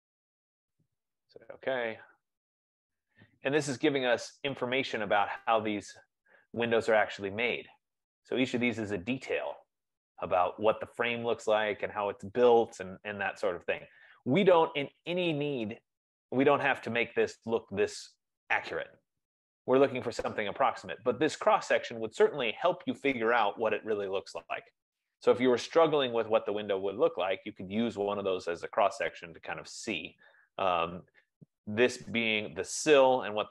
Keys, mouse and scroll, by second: 0.4 click, 1.9 click, 4.3 scroll, 6.2 scroll, 8.1 right click, 8.1-8.4 scroll, 9.3 scroll, 10.6 scroll, 13.2 F15, 14.3 middle click, 15.1 middle click, 16.0 middle click, 16.9 right click, 17.6 middle click, 21.8 middle click, 22.5-23.3 scroll, 26.5-26.9 scroll, 27.6-28.4 scroll, 28.4-29.4 scroll, 30.2 scroll, 32.4-32.8 scroll.